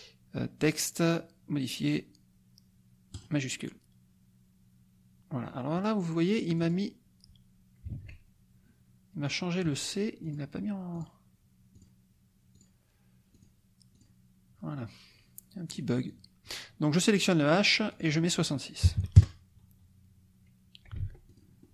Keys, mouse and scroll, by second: 3.1 click, 5.4 click, 6.6 click, 7.9 ctrl+a, 10.2 click, 10.9 click, 11.7 click, 12.5 click, 13.4 click, 14.0 click, 15.6 click, 16.1 click, 17.9 click, 18.8 KP_6, 19.1 KP_Enter, 21.0 ctrl+z, 21.2 ctrl+click.